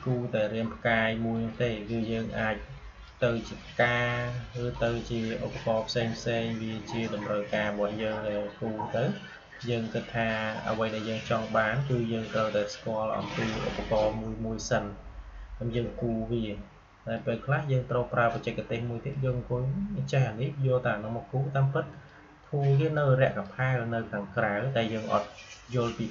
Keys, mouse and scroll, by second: 7.5-15.7 drag, 15.6-21.6 drag, 21.9-25.9 drag.